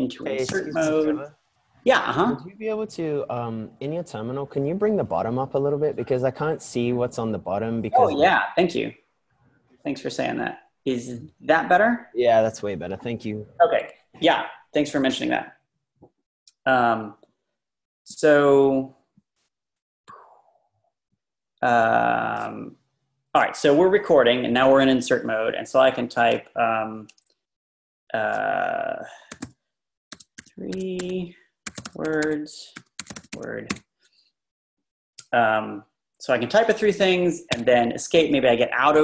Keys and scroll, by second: 0.5 i, 29.4-34.2 typing, 37.5 Escape.